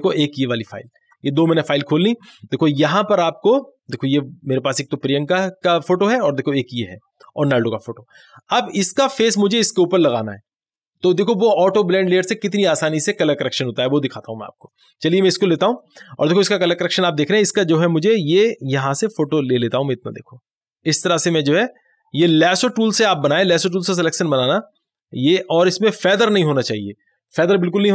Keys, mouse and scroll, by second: 0.9 ctrl+click, 6.6 click, 9.6 click, 14.6 click, 19.3-24.3 drag.